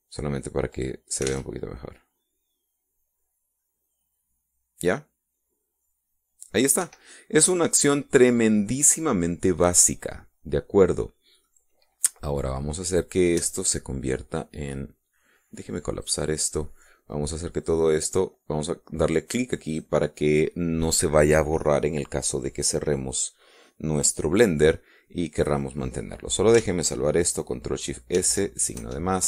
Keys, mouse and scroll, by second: 0.4 click, 1.9 click, 2.6 alt+a, 8.1 Escape, 8.3 middle click, 8.8 middle click, 9.1-11.5 drag, 9.1-11.5 middle drag, 12.7-13.8 middle drag, 17.3 click, 20.9 click.